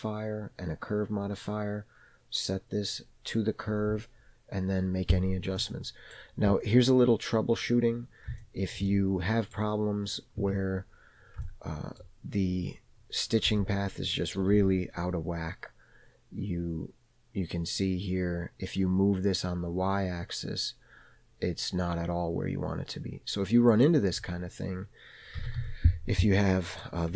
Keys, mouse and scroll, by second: 5.6-6.2 middle drag, 6.9-7.9 scroll up 2, 7.9-8.3 scroll up 1, 8.4 shift+middle click, 8.9-9.6 middle drag, 10.5 Tab, 11.5 shift+middle click, 13.5 g, 25.7 g.